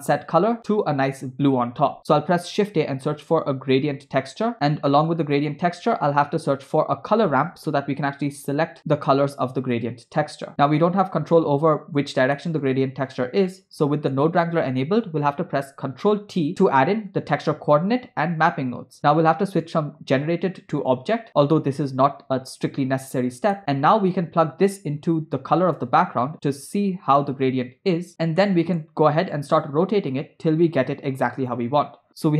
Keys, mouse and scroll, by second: 2.0 shift+a, 4.5 BackSpace, 4.9 middle click, 5.1 scroll up 3, 6.0 shift+a, 10.7-12.2 drag, 12.4 middle click, 13.1 click, 13.5 middle click, 15.6 ctrl+t, 17.1 click, 20.3-21.1 drag, 23.6 middle click, 24.4-26.5 drag, 28.5 middle click, 29.6-32.3 drag.